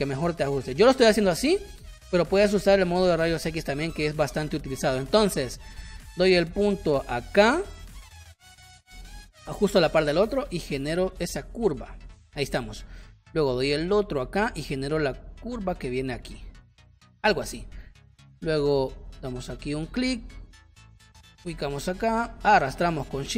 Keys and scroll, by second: 3.6 space, 4.9 space, 12.3 space, 16.3 space.